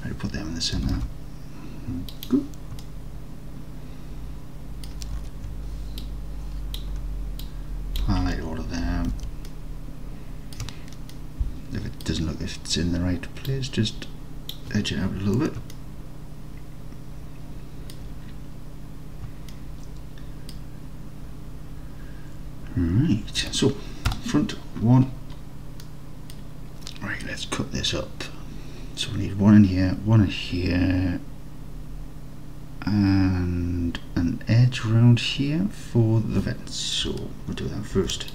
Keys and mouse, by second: 0.9 g, 1.0 g, 2.9-5.0 alt+drag, 5.2 alt+z, 6.1 click, 7.6 shift+click, 9.2 alt+z, 9.6-10.6 alt+middle drag, 11.2 middle click, 13.6-14.6 drag, 15.8-18.0 alt+middle drag, 19.6-20.6 alt+middle drag, 24.2 KP_1, 26.0 middle click, 38.0 ctrl+r.